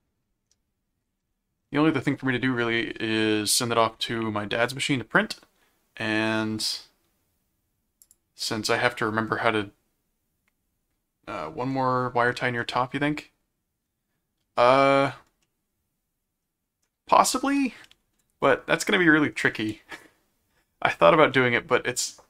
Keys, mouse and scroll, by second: 8.0 click, 12.6-14.4 middle drag, 15.4-16.4 middle drag, 21.9-22.2 middle drag.